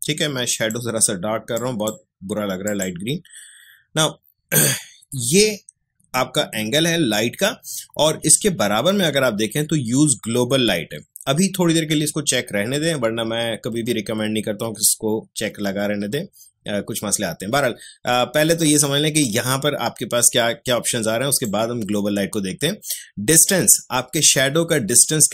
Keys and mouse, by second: 20.3-25.3 drag.